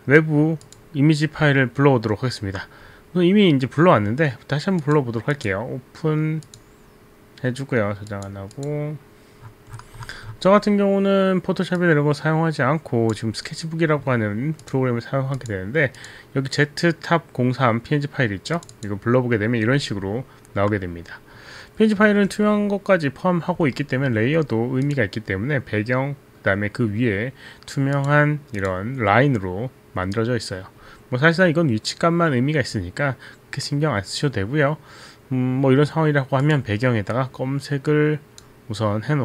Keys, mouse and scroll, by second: 0.7 click, 4.8 click, 5.4 click, 6.4 click, 8.5 click, 11.8 click, 15.2 click, 15.4 click, 16.0 click, 18.6 click, 19.6-20.6 scroll down 2, 23.8 alt+middle click, 24.8 middle click, 25.2 click, 28.0 click, 28.5 click, 29.2 click, 36.4 click, 38.0 click.